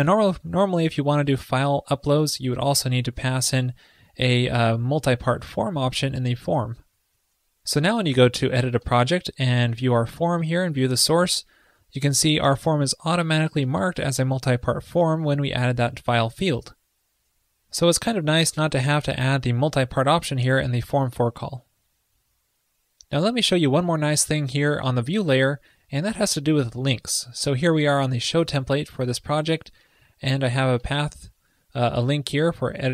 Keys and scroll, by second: 10.8 alt+super+u.